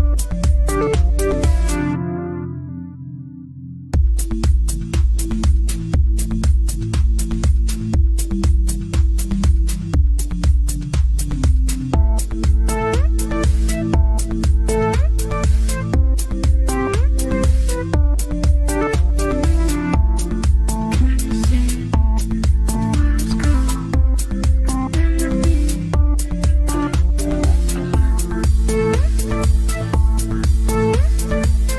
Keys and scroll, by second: 2.0 ctrl+g, 9.3 ctrl+Page_Down, 15.1 ctrl+Page_Down, 15.6 ctrl+Page_Down, 20.8 z, 22.1 F3, 24.9 ctrl+Page_Down, 26.0 Left, 26.3 Up, 26.5 Left, 26.8 Up, 27.4 Left, 29.6 shift+F2, 29.8 Escape.